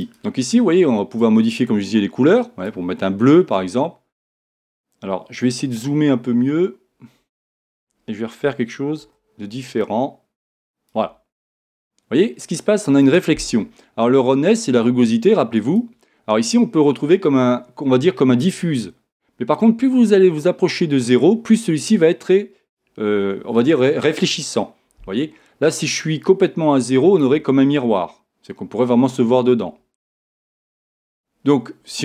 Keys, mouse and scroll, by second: 0.0-1.8 drag, 5.7-8.2 middle drag, 13.0-16.1 drag, 19.6-21.4 drag, 26.2-28.0 drag.